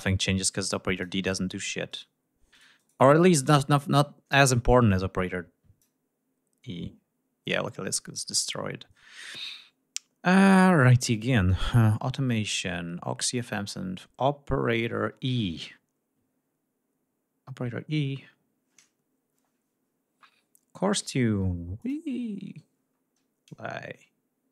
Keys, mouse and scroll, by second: 0.5 click, 1.5 shift+right click, 2.1 shift+right click, 3.0 shift+right click, 4.5 click, 7.0 click, 9.8-10.2 scroll up 2, 10.7 click, 14.5-15.5 scroll down 4, 21.4 click, 22.3-22.7 scroll down 2, 23.0 scroll up 2.